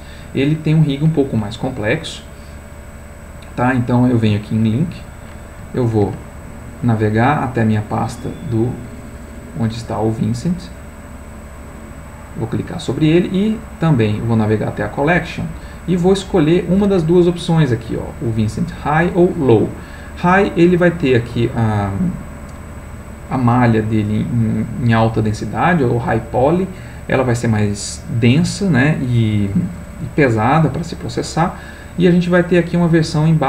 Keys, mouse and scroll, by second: 3.0 click, 4.8 click, 7.0 click, 8.6 click, 9.5 click, 10.5 click, 11.0 click, 11.8 click, 14.0 click.